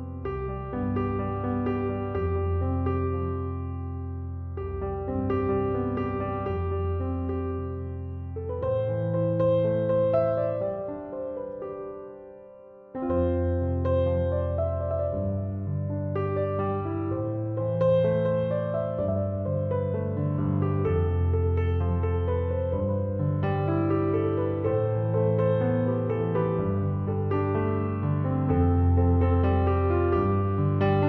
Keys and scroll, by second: 4.3 BackSpace.